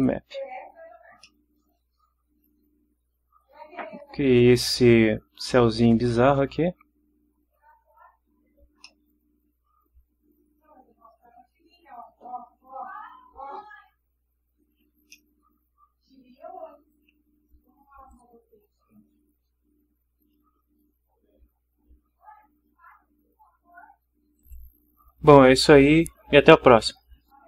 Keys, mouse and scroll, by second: 1.2-5.0 middle drag, 5.0-7.7 drag, 8.8-15.0 middle drag, 15.1 ctrl+middle click, 15.1-16.8 ctrl+drag, 18.1 click, 24.4 click.